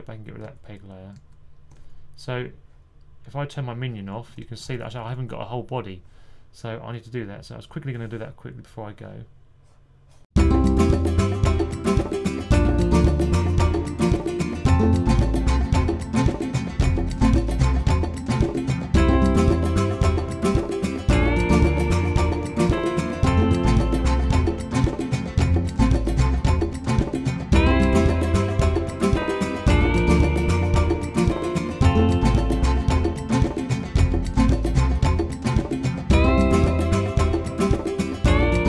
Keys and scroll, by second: 0.3 super+z, 1.0 super+z, 4.5-4.9 typing, 11.5 super+8, 12.3 super+8, 12.9 super+8, 13.0 super+8, 14.1-16.1 typing, 19.3 2, 21.6 typing, 23.8-26.3 typing, 30.4 super+s, 30.8 2, 32.9 1, 37.5 typing.